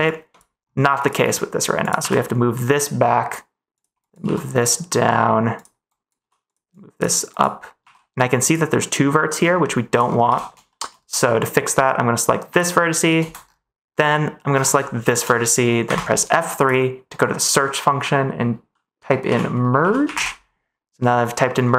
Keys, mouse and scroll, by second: 1.9 g, 3.7 click, 4.0 click, 4.2 g, 5.5 click, 5.8 click, 6.1 g, 6.7 click, 7.7 g, 9.6 middle click, 10.2 ctrl+s, 10.6 middle click, 15.8 F3.